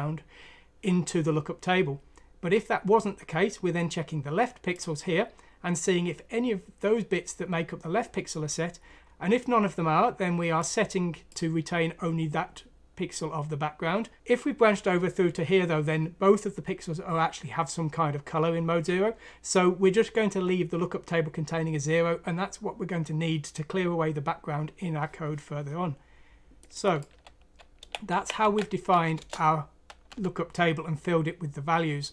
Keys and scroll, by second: 27.8 ctrl+c, 28.1 ctrl+f, 28.4 ctrl+v, 29.2 Return, 30.1 F3, 31.9 typing.